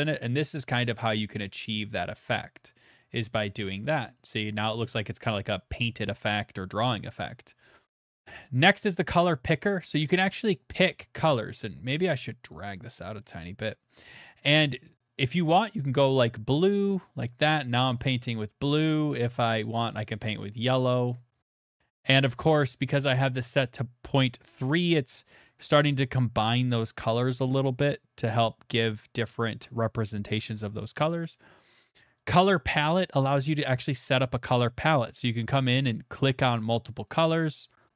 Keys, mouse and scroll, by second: 0.2 click, 0.9 click, 2.0 click, 2.6 click, 3.0 middle click, 3.1 middle click, 3.2 middle click, 4.1 middle click, 8.1 shift+middle click, 8.4 click, 8.4 middle click, 9.2 middle click, 9.2 middle click, 9.3 middle click, 9.3 middle click, 13.2 click, 15.4 click, 15.7 click, 16.2 middle click, 16.7 click, 17.0 click, 18.0 click, 18.0 click, 18.3 click, 19.7 click, 20.5 click, 21.3 click, 21.8 click, 22.1 click, 25.1 click, 25.4 click, 27.8 click, 31.7 click, 32.2 scroll, 32.7 middle click, 32.8 scroll, 32.9 middle click, 33.6 click, 34.9 middle click, 34.9 click, 37.1 click, 37.8 click.